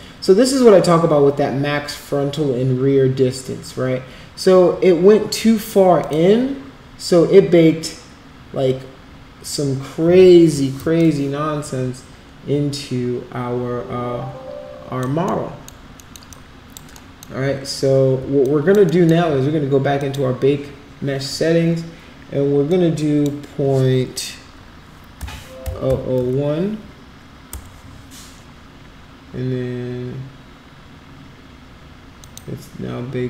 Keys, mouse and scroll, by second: 6.0 click, 11.0-14.9 alt+drag, 15.4 alt+middle click, 16.0 alt+middle click, 16.3 alt+click, 17.1 alt+middle click, 18.4 alt+click, 18.8 alt+middle click, 20.0 click, 22.6 click, 25.9 0, 27.5 Return, 32.2 click.